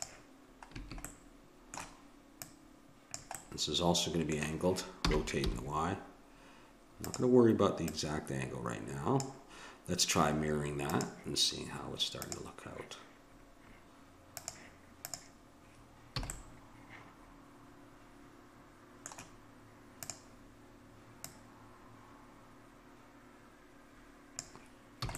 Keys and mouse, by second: 1.1-3.1 middle drag, 2.4-4.3 drag, 3.4 middle click, 5.1 r, 7.8-9.8 drag, 10.9-12.8 drag, 14.4-16.2 drag, 16.2 a, 16.4-17.4 middle drag, 20.0-23.0 drag, 25.1 a.